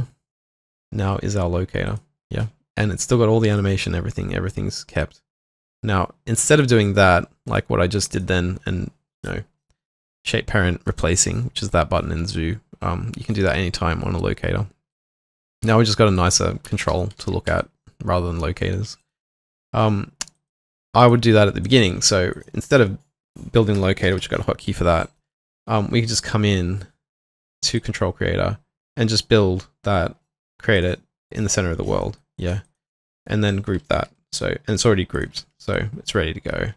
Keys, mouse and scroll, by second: 0.8 typing, 8.1 alt+click, 15.3 double click, 15.6 typing, 16.9 typing, 17.2 alt+q, 17.6 alt+click, 19.0 alt+right click, 21.6 alt+click, 22.3 alt+click, 24.1 middle click, 25.4 ctrl+z, 25.4 alt+middle click, 27.8 double click, 32.0 alt+middle click, 32.3 alt+right click, 32.6 alt+click, 35.2 shift+click.